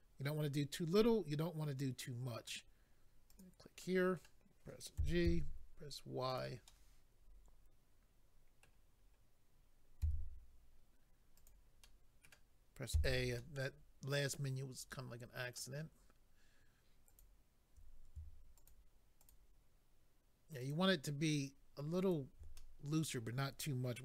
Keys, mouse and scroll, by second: 3.3 click, 3.8 middle click, 5.0-5.4 typing, 6.3 click, 6.6 middle click, 9.0-9.8 scroll up 1, 10.0 z, 11.3 click, 11.5 click, 11.8 middle click, 12.9 a, 13.4 middle click, 17.2 click, 18.6 shift+click, 18.7 shift+click, 19.2 shift+click, 19.3 shift+click, 20.6 shift+click, 20.7 shift+click, 22.0 shift+click, 22.1 shift+click, 22.6 middle click.